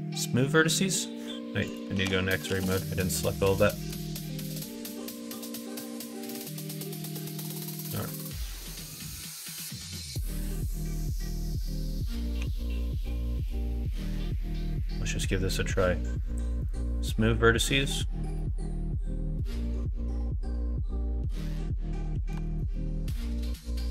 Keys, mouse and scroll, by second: 1.7 click, 1.9 ctrl+z, 2.5 ctrl+z, 3.9 alt+z, 4.6-6.1 drag, 7.3 click, 9.8 click, 10.2-11.5 drag, 12.3 3, 14.8-16.7 drag, 18.3-22.3 middle drag, 22.4 alt+z, 22.7-23.9 middle drag.